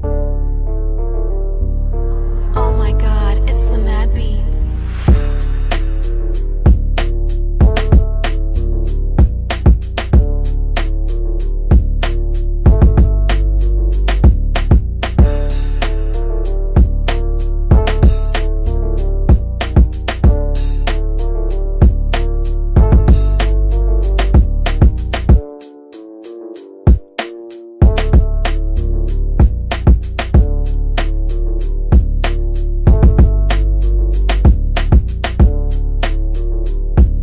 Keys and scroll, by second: 0.2 F3, 28.6 ctrl+z, 29.3 ctrl+z, 35.4 F3.